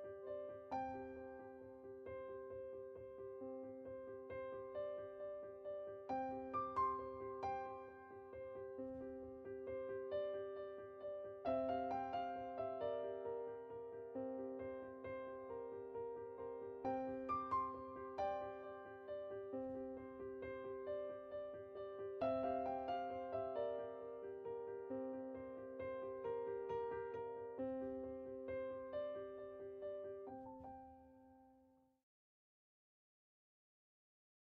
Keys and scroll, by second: 0.3 typing, 2.2 typing, 20.3-21.0 typing, 22.3 typing.